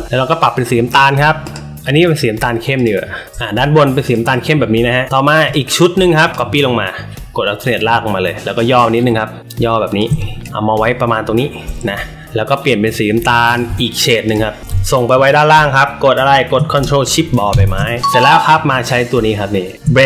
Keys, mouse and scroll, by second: 1.4 click, 2.7 click, 4.0 click, 4.2 click, 5.4 space, 5.5 click, 6.3-7.6 alt+shift+drag, 8.4-9.9 alt+shift+drag, 10.4 shift+click, 13.4 click, 14.2 click, 17.4 ctrl+shift+[.